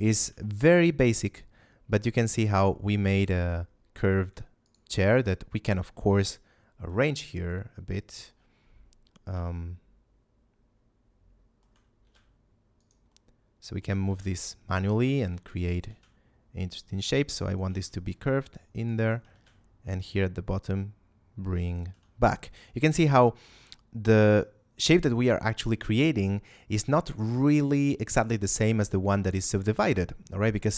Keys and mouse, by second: 0.4 shift+middle click, 3.3 Tab, 4.5 alt+right click, 9.5 shift+middle click, 11.9 g, 12.7 shift+click, 13.0 shift+middle click, 14.0 g, 14.7 shift+click, 15.3 alt+right click, 15.8 g, 17.4 shift+click, 17.7 a, 18.7 right click, 19.3 g, 21.5 shift+click.